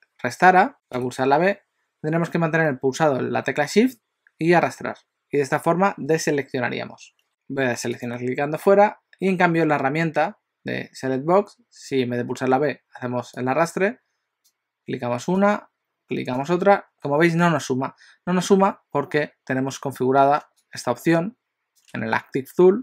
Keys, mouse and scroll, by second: 0.7 click, 0.7 b, 1.1 b, 8.0 click, 13.5 click, 15.4 click.